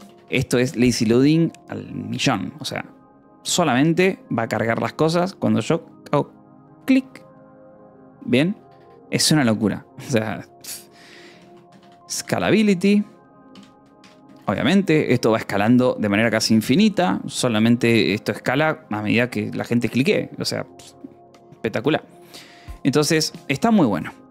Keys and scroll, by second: 0.0-0.4 typing, 1.2 ctrl+s, 8.7-9.6 typing, 11.4-14.4 typing, 15.0 ctrl+s, 15.5 o, 16.1 :, 16.3 space, 23.6 Escape, 23.7 j.